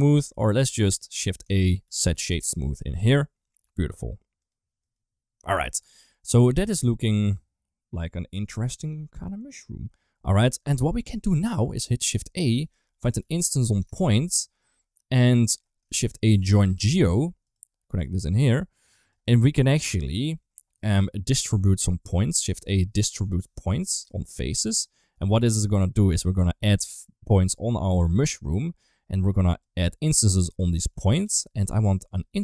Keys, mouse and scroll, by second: 0.3 middle click, 0.8 middle click, 1.4 shift+a, 4.3 click, 4.7 click, 6.2 ctrl+s, 6.5-8.0 middle drag, 11.4 middle click, 12.0 click, 12.5 shift+a, 15.3 click, 15.7 shift+a, 17.9 click, 19.0 click, 19.8 middle click, 20.6 middle click, 21.0 middle click, 21.9 click, 22.4 shift+a, 25.1 middle click, 26.0 ctrl+shift+click, 28.5 middle click, 30.5 click, 30.7 ctrl+x, 31.2 ctrl+s, 31.7 middle click.